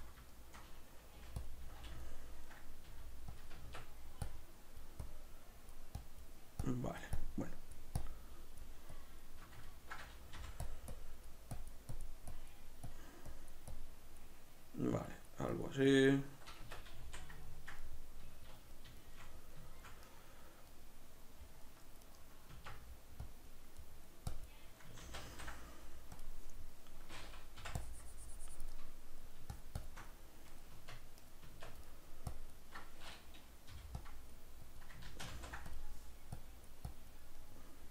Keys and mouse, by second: 0.3-1.5 shift+middle drag, 1.1 g, 1.5 click, 1.7 z, 2.0-3.4 ctrl+middle drag, 2.9 g, 3.4 click, 3.5 Tab, 3.7 b, 4.3 click, 9.7 ctrl+middle click, 10.3 click, 16.6 b, 16.7 Tab, 16.7 click, 17.4-22.5 ctrl+middle drag, 22.5 Tab, 22.7 b, 23.2 click, 23.8 middle click, 24.3 click, 25.0 ctrl+z, 26.2 click, 26.5-27.8 middle drag, 27.8 click, 28.7 middle click, 29.5 shift+click, 30.1-31.2 middle drag, 30.7 b, 30.9 Tab, 31.2 right click, 31.5 Tab, 31.9 middle click, 32.3 click, 34.0 click, 35.1 ctrl+z, 35.7 click, 37.4 middle click.